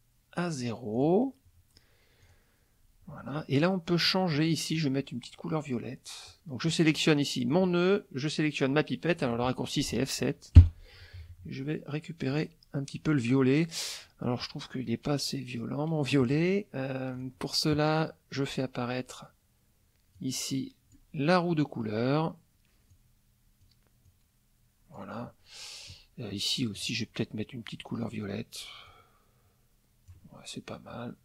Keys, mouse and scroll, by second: 0.9 click, 2.2 click, 4.7 click, 7.5 click, 10.5 F7, 12.3 click, 17.1 click, 20.1 click, 22.9 click, 24.0 click, 26.7 click, 28.0 click, 28.8-30.3 drag.